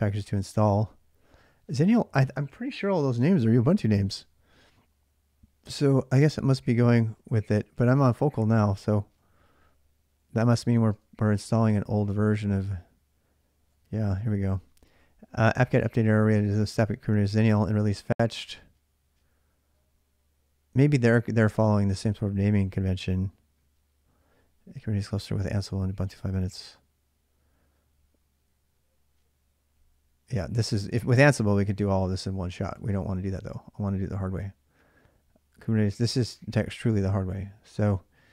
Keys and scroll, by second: 10.7 BackSpace, 32.7 BackSpace.